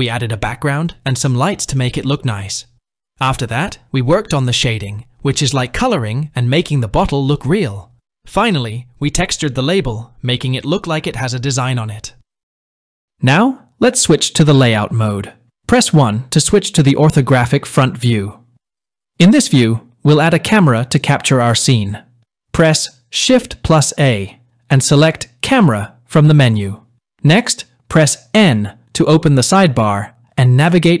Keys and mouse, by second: 12.8-14.9 drag, 17.3 KP_1, 23.2 shift+a, 28.1 n.